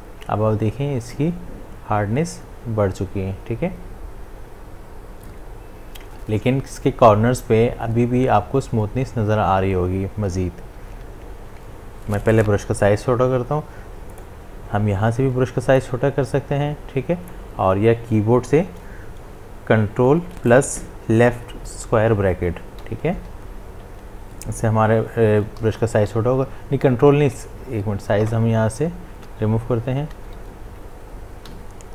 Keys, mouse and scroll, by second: 11.5 ctrl+z, 14.1 right click, 15.8-19.5 drag, 20.1-22.8 drag, 22.8 ctrl+[, 25.6-26.3 typing, 31.5 b.